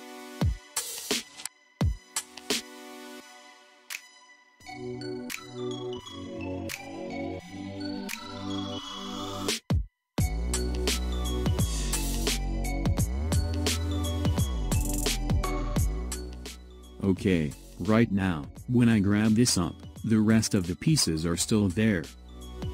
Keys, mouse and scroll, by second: 0.8-1.6 middle drag, 1.6-2.6 scroll down 4, 2.6-3.4 shift+middle drag, 3.4-4.8 scroll up 2, 4.8 ctrl+s, 7.3-8.7 scroll down 2, 8.7-11.7 middle drag, 12.1 click, 13.3-16.1 middle drag, 16.1-17.7 drag, 17.7-19.7 middle drag, 19.7 click.